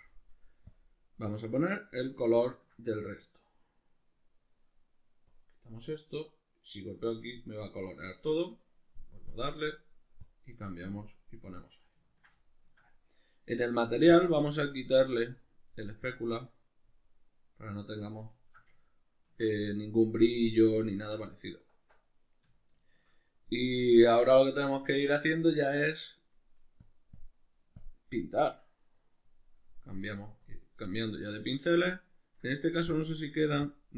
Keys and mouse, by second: 0.7 click, 2.5-5.3 ctrl+middle drag, 5.3 click, 6.2-7.1 drag, 7.8-9.3 middle drag, 9.3 click, 10.3 click, 11.0 click, 12.1-14.1 ctrl+middle drag, 14.1-16.9 drag, 16.9-26.9 middle drag, 26.9-28.9 drag, 28.9-30.5 middle drag, 30.5-33.9 drag.